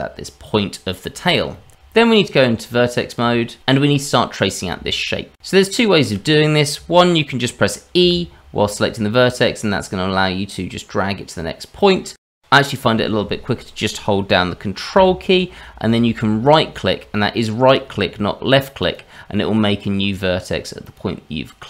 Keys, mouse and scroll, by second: 0.9-1.8 scroll down 1, 1.8 Tab, 4.6 shift+middle click, 8.0 e, 12.2 shift+middle click, 14.4-14.9 scroll down 1, 18.8 ctrl+right click, 20.8 ctrl+right click.